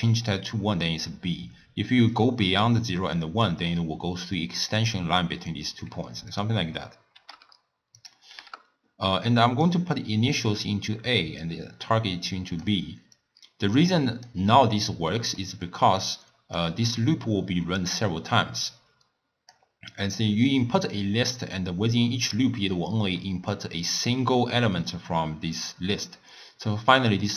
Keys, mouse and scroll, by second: 2.1-5.2 drag, 6.3-9.7 drag, 11.5 drag, 13.2 click, 15.1-16.0 middle drag, 16.0 click, 18.6 click, 27.0 click.